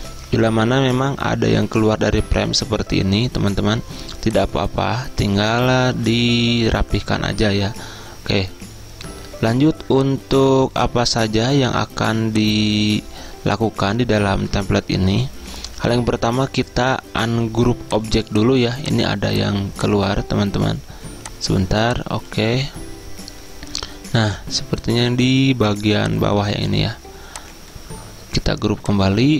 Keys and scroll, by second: 5.9 ctrl+z, 14.3 ctrl+z.